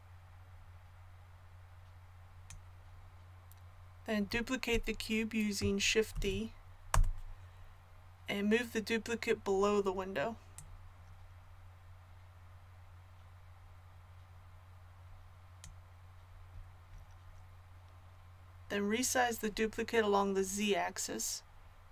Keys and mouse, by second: 6.1 shift+d, 10.5-21.9 middle drag.